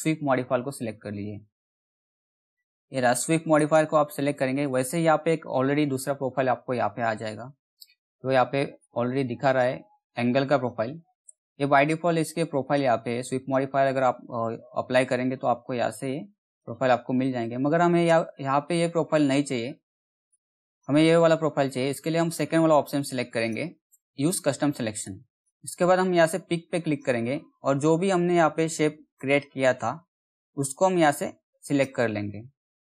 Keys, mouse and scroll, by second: 3.1 click, 8.3-19.8 drag, 19.8-22.7 drag, 22.9-26.3 drag, 28.7 alt+middle click, 29.7 scroll up 1, 31.2 click, 31.8 scroll down 1.